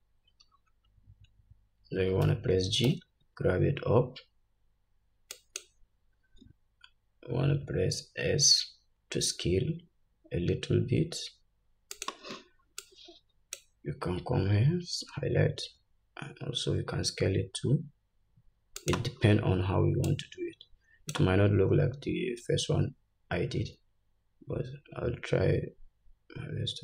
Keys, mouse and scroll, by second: 2.3 g, 12.9-19.0 drag, 15.7 s, 20.1-26.8 drag, 23.6 s.